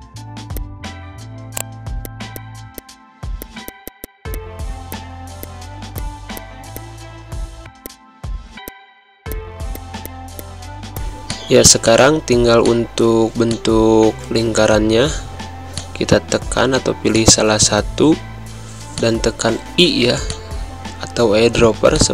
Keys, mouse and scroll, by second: 0.4 g, 0.6-3.4 drag, 3.9-5.3 typing, 4.0 click, 4.3 click, 4.9 click, 5.4-7.6 drag, 7.6 g, 7.8-10.1 drag, 10.1 click, 12.2 z, 12.6 click, 13.3 space, 13.4 click, 13.7 space, 15.2 v, 15.7 click, 17.1 click, 18.4 v, 18.9 click, 19.8 i, 20.2 click, 21.1 c, 21.9 click.